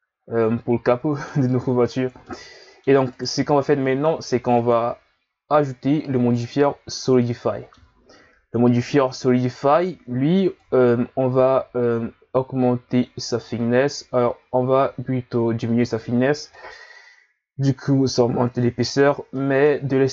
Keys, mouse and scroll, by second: 1.8-2.3 scroll up 4, 2.3-3.1 middle drag, 3.1 right click, 4.5 click, 7.1-10.1 middle drag, 10.6 click, 16.1-16.5 scroll up 1, 16.5-18.9 middle drag, 18.9-19.3 scroll down 2, 19.3 middle click, 20.0-20.1 scroll up 1.